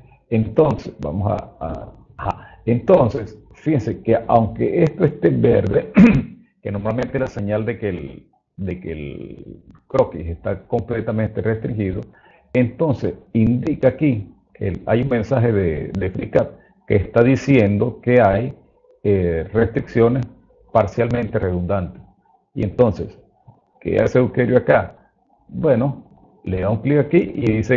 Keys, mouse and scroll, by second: 1.3-21.7 right drag, 25.7 click.